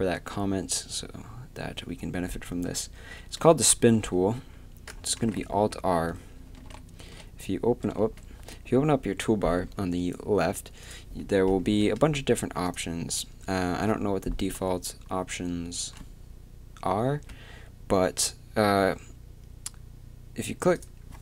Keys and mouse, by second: 5.2 alt+r, 6.5-8.0 typing.